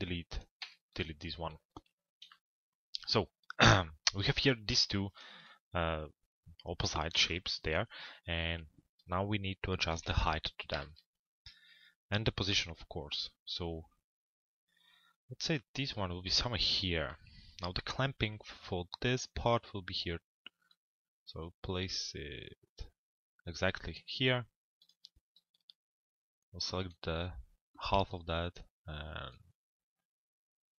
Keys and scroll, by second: 9.5 f, 10.2 z.